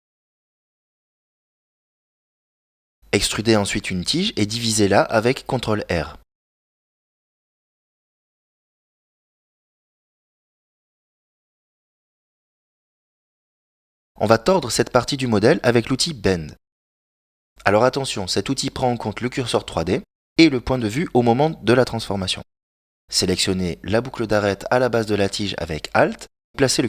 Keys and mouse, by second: 11.5 ctrl+r, 19.1 middle click, 20.3 middle click, 22.1 right click, 23.4 alt+right click, 25.5 shift+s.